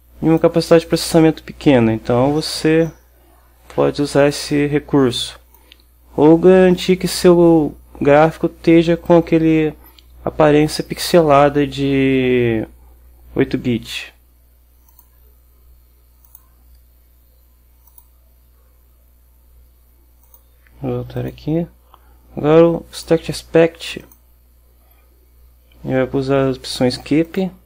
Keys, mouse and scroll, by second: 2.9-6.3 drag, 15.0 click, 16.3 click, 18.0 click, 20.3 click, 21.3 click, 24.1 click, 27.3 click.